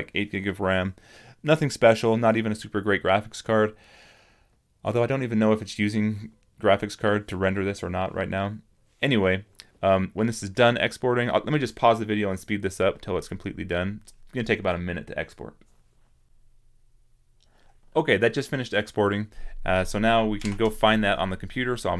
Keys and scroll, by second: 20.4 super+-.